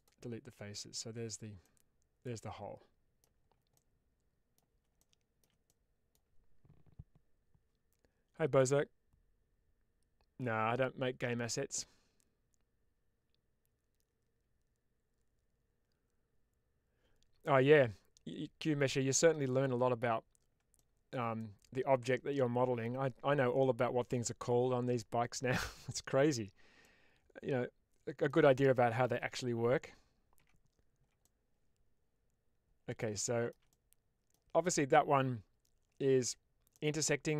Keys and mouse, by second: 0.9 Tab, 1.5-3.1 middle drag, 3.6-4.4 middle drag, 4.9-5.3 shift+middle drag, 5.5-6.0 middle drag, 20.6-21.0 shift+middle drag, 21.3-22.7 middle drag, 26.7-28.2 middle drag, 30.3 Tab, 31.1-32.9 middle drag, 33.2 shift+middle click, 33.6 middle click, 36.6-37.3 middle drag.